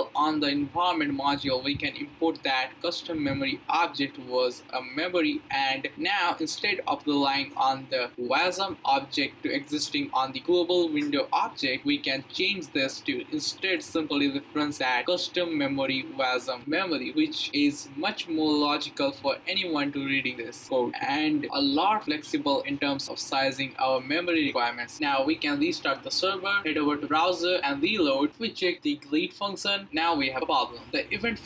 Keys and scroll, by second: 2.7-4.1 typing, 4.4 Return, 5.1-6.8 typing, 10.1-12.7 typing, 13.1 Return, 25.8 Up, 26.1 Return, 28.3 Up, 28.8 Return.